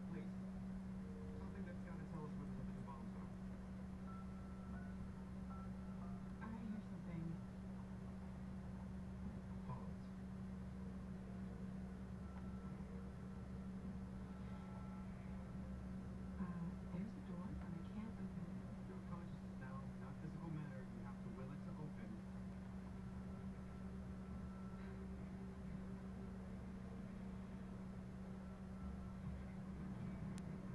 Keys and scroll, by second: 11.2 Delete.